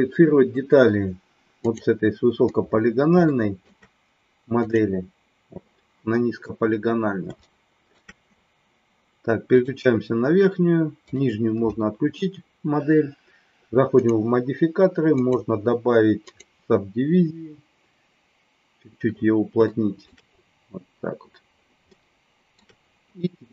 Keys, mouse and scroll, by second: 3.2 shift+middle click, 4.6 click, 7.3 shift+middle click, 11.0 click, 14.0 click, 15.2-18.1 drag, 19.6 shift+middle click, 21.8 shift+middle click.